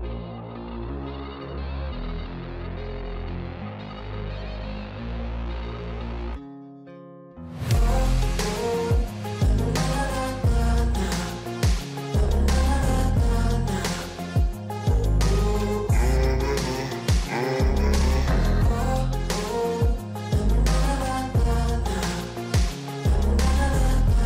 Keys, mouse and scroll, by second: 1.9-5.0 drag, 7.5-10.5 drag, 14.0-17.1 middle drag, 21.6-24.2 drag.